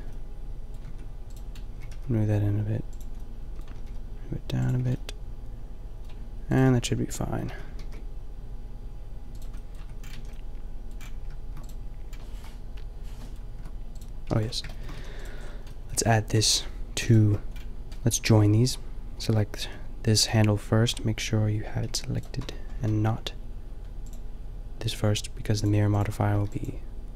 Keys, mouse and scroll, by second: 0.8 Tab, 1.7 click, 1.7 g, 3.7 g, 4.7 a, 6.6 Tab, 7.5 a, 7.8 ctrl+r, 9.7 Tab, 10.1 a, 12.2-12.6 middle drag, 12.6 Delete, 12.6-13.6 drag, 13.6 Tab, 14.3 Tab, 15.0 a, 19.6 g, 20.9-21.8 middle drag, 21.8 g, 22.4 Tab, 22.8 a.